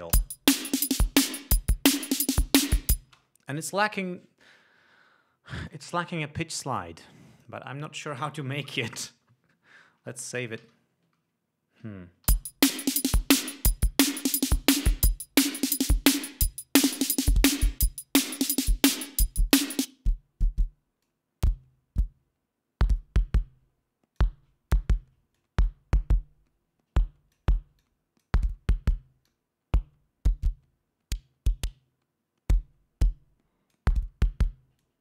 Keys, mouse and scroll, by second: 0.5 l, 1.7 click, 3.5 space, 6.1 click, 7.1 click, 11.0 ctrl+s, 12.7 l, 14.9-19.3 drag, 19.9-20.5 drag, 21.4-24.8 drag, 25.7-27.9 drag, 28.2-28.8 drag, 29.7-34.3 drag.